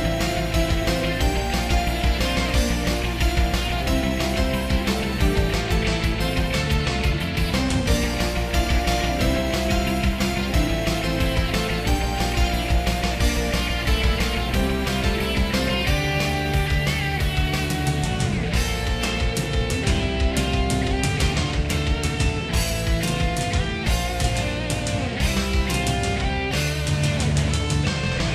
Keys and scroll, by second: 4.6 ctrl+z, 9.0 ctrl+z, 11.9 ctrl+z, 14.4 ctrl+z, 15.6 ctrl+z, 15.8 ctrl+z, 16.5 ctrl+z, 17.2 ctrl+z, 17.9 ctrl+z, 19.1 ctrl+z, 19.7 ctrl+s, 21.6 ctrl+z, 22.6 ctrl+z, 23.4 ctrl+z, 24.4 ctrl+z, 26.2 ctrl+z, 27.4 ctrl+z.